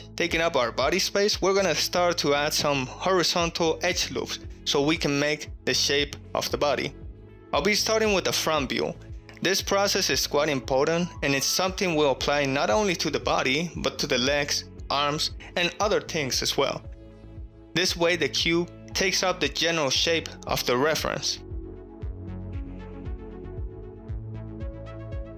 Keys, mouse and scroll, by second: 1.3-2.2 middle drag, 2.7 KP_1, 3.4 shift+middle click, 4.0-4.3 ctrl+shift+middle drag, 5.1 alt+z, 5.6 Tab, 6.0 alt+z, 7.7 ctrl+r, 9.2 right click, 10.3 alt+z, 10.3 s, 10.4 x, 12.4 click, 12.7 g, 13.0 z, 14.7 click, 15.6 ctrl+r, 16.0 right click, 16.3 alt+z, 16.7 s, 18.0 click, 18.4 shift+middle click, 18.8 shift+middle click, 19.4 alt+z, 19.7 ctrl+r, 20.4 right click, 20.7 alt+z, 20.9 s, 21.0 x, 21.9 click, 22.2 shift+middle click, 22.7 alt+z, 23.3 alt+z, 23.6 alt+click, 23.6-24.9 typing, 24.3 click, 24.5 ctrl+r, 24.7 right click, 25.3 click.